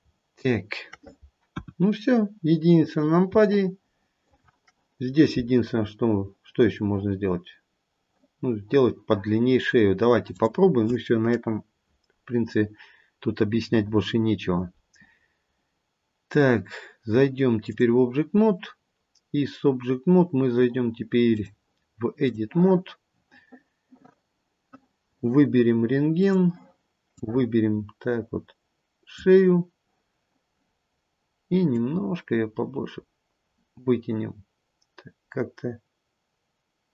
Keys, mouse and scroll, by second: 1.4-2.2 scroll down 4, 1.4 KP_1, 2.2-2.9 scroll down 1, 2.9 scroll up 1, 3.4 shift+middle click, 10.4 click, 21.2 click, 24.9-26.3 scroll down 1, 26.3 click, 27.1 click, 30.7-31.6 scroll down 2, 31.6 click.